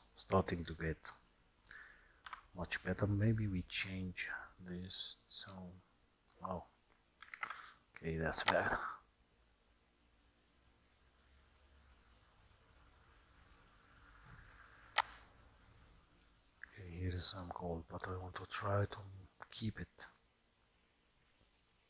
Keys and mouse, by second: 1.1 click, 2.3 n, 3.9 click, 7.5 ctrl+z, 8.5 click.